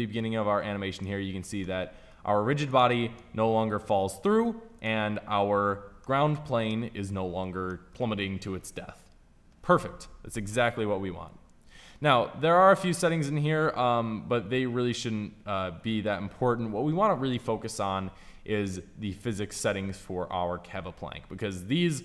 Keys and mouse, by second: 2.2 click, 2.6-5.0 middle drag, 5.0-12.2 right drag.